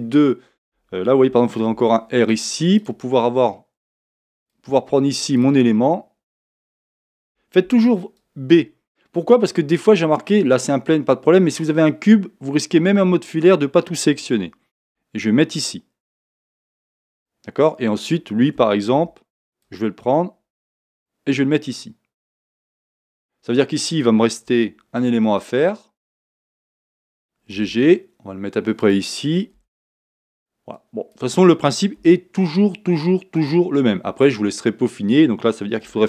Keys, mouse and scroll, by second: 1.7 ctrl+r, 5.5 click, 7.2 a, 24.4 ctrl+r, 27.9 g.